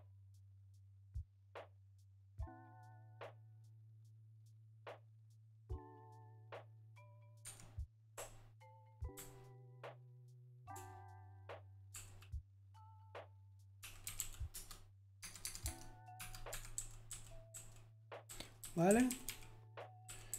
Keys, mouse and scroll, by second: 8.8-14.6 typing, 15.2 Tab, 15.4 Tab, 15.6 Tab, 15.9-20.3 typing.